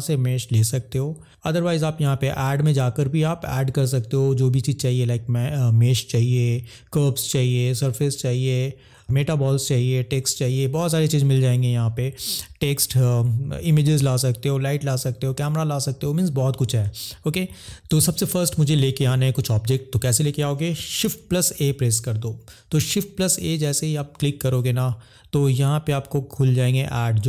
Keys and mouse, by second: 1.2 click, 2.6-15.7 drag, 21.4 shift+a.